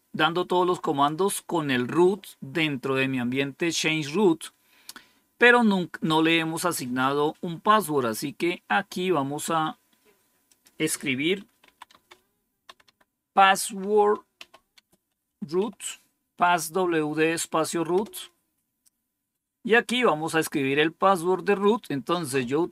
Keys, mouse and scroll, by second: 6.6 scroll down 2, 10.4 click, 11.5-15.4 typing, 17.8 Return.